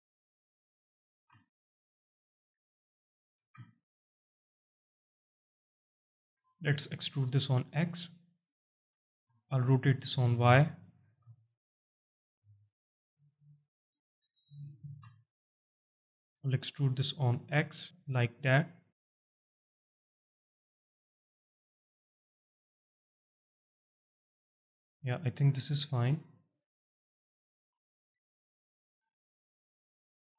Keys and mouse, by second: 0.4 shift+click, 1.1 g, 2.2 shift+click, 3.4 g, 5.5 shift+click, 6.3 e, 8.6 shift+click, 9.2 r, 10.4 click, 11.0 g, 13.7 shift+click, 14.8 g, 16.0 shift+click, 16.4 e, 21.8 shift+click, 22.4 z, 22.9-27.0 alt+drag, 27.3 alt+shift+click, 27.9 alt+click, 29.2-30.3 alt+drag.